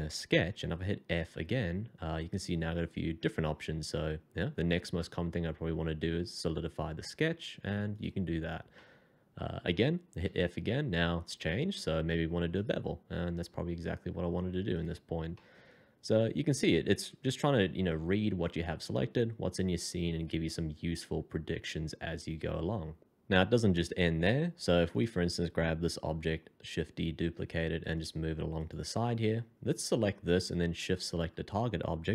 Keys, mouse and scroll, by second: 1.1 f, 8.3 scroll down 1, 8.7 middle click, 10.3 f, 15.3 middle click, 26.1 shift+d.